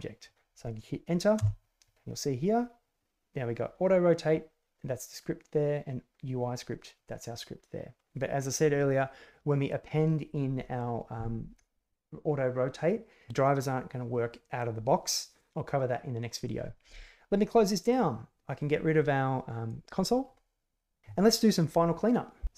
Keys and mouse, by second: 1.3 Return, 17.8 click.